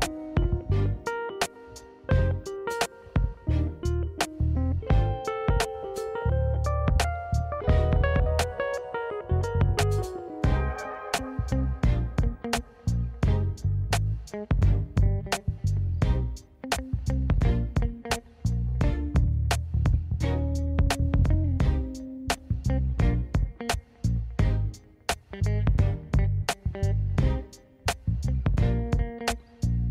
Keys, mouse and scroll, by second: 0.6 click, 2.0 click, 4.2 click, 5.4-7.0 drag, 7.8 click, 8.6 scroll down 2, 8.9-9.3 scroll up 1, 9.5-10.8 drag, 11.2 click, 11.7 click, 12.5 click, 13.2 scroll up 1, 13.4 scroll down 1, 13.5 scroll down 1, 13.8 click, 13.9 middle click, 14.4-14.8 scroll up 2, 14.8 shift+middle click, 15.1 click, 15.3 middle click, 15.8 KP_1, 17.7 click, 18.2 click, 19.0 click, 19.1 click, 21.0-21.5 scroll down 2, 21.5 click, 21.9 click, 22.9 click, 23.6 click, 25.0-27.9 drag, 28.8 click, 29.7 click.